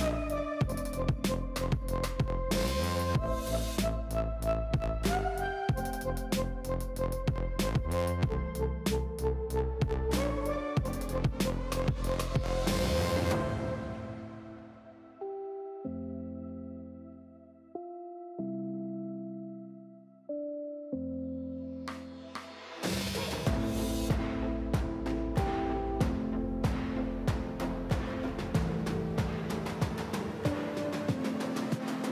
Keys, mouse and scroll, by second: 0.7 alt+click, 1.2 2, 1.7 click, 2.1 alt+click, 2.5-3.2 middle drag, 3.2-4.4 scroll up 4, 4.4 alt+shift+click, 4.8 scroll down 5, 5.0 middle click, 5.4-5.7 scroll up 1, 5.7 alt+shift+click, 5.9 middle click, 6.2-6.6 scroll up 3, 8.4 ctrl+b, 9.4 click, 9.9 ctrl+b, 11.2-11.8 scroll down 2, 12.0 ctrl+r, 12.8-13.3 drag, 12.8 middle click, 13.4 scroll up 2, 14.3 ctrl+r, 15.8 click, 15.9-16.8 scroll down 1, 16.8-17.4 drag, 16.8 middle click, 17.2 shift+middle click, 17.4-17.8 scroll up 2, 17.8 click, 17.8 middle click, 18.3 ctrl+r, 21.9 KP_1, 22.3 click, 22.3 shift+middle click, 22.5 alt+z, 22.7-24.1 scroll up 4, 25.2-26.1 scroll down 4, 26.1-27.5 middle drag, 30.7-31.2 middle drag, 31.2-31.5 scroll up 2, 31.5 alt+z, 31.9 3.